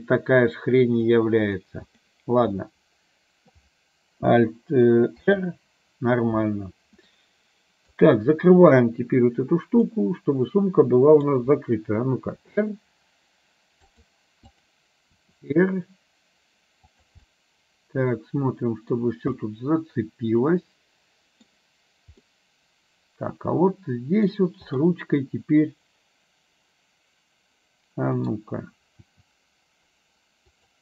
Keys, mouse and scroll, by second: 2.7 middle click, 5.3 alt+r, 7.2 middle click, 9.9-11.4 middle drag, 12.4 r, 14.5 click, 15.3 r, 17.4-19.0 middle drag, 19.5-21.5 middle drag, 22.3-24.4 middle drag, 24.8 click, 25.3-28.3 middle drag, 29.1 r.